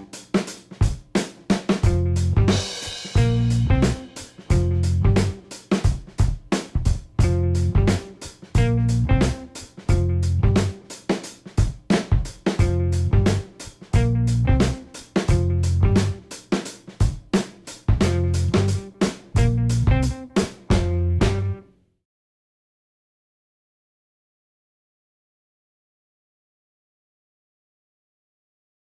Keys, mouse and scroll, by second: 2.0 click, 2.9 click, 6.3 click, 7.5 click, 8.6 click, 10.4 click, 11.2 click, 14.3-19.0 drag, 23.6 KP_Add, 24.2 KP_Add, 25.2 KP_Add, 26.0 KP_Subtract.